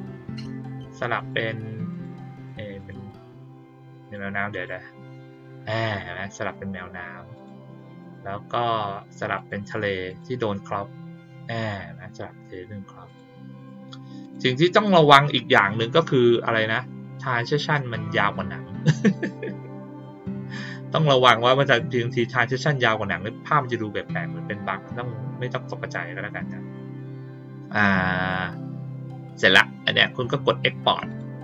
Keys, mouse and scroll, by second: 0.5 click, 1.1 click, 1.9 click, 2.3 click, 2.7 click, 3.9 click, 4.5 click, 7.3 click, 7.9 click, 9.3 click, 10.0 click, 13.0 click, 13.5 click, 14.2 click, 14.7 click, 31.0 click.